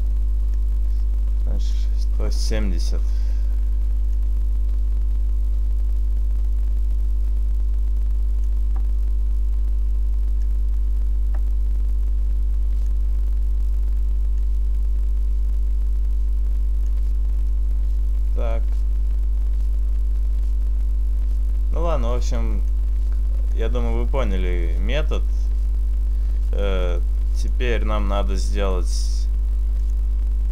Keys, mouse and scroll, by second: 0.7 click, 4.2 click, 10.6 click, 14.5 click, 17.6 middle click, 21.2 middle click, 27.4 click.